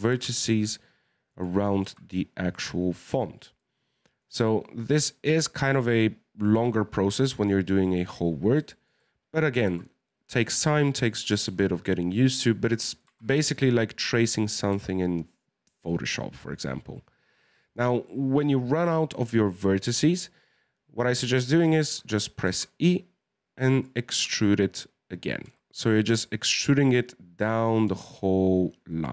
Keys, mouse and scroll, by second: 1.7 middle click, 5.6-6.4 scroll down 4, 6.4 right click, 6.5 g, 8.1 scroll up 2, 8.8 middle click, 9.5 right click, 9.6 g, 11.3 right click, 11.5 g, 13.0 right click, 13.0 g, 14.6 right click, 14.7 g, 22.4 e, 24.1 e, 25.4 e, 27.9 e.